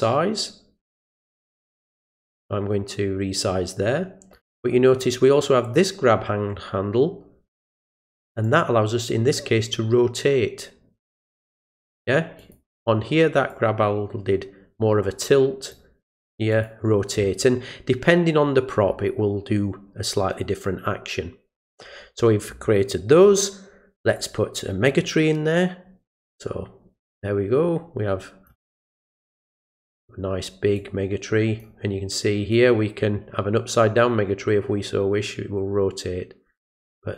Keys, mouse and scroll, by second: 8.4-11.6 drag, 12.4 click, 13.5-15.7 drag, 16.5 click, 24.1 click, 26.1-28.5 drag, 28.9 click, 30.7 click, 32.5-37.1 drag.